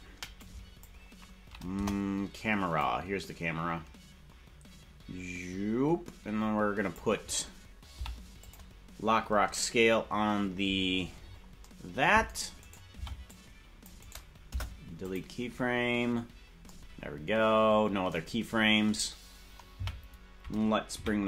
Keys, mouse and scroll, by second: 0.4 click, 1.7 KP_0, 2.8-7.0 drag, 10.3-10.9 scroll down 1, 10.3 i, 10.9 scroll down 9, 11.0 scroll down 2, 11.1 scroll up 1, 11.5-12.5 scroll down 1, 12.5 right click, 12.9 c, 14.4 Delete, 19.8 Right, 20.9 KP_Decimal.